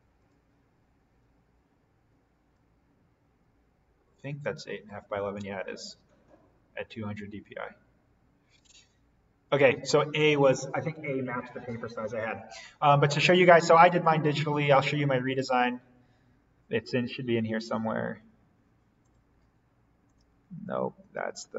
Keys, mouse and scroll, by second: 0.1 click, 2.5-7.3 drag, 9.4 click, 13.8 click, 18.9 click.